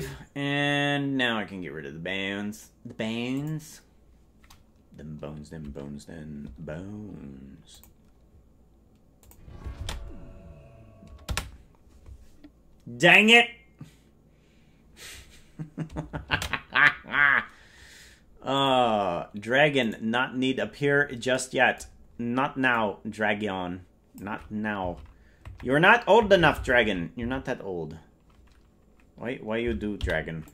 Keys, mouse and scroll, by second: 3.3 ctrl+click, 7.7 click, 9.1 click, 11.4 ctrl+space, 18.5 ctrl+click, 19.9 right click, 22.8-24.2 drag, 24.9 click.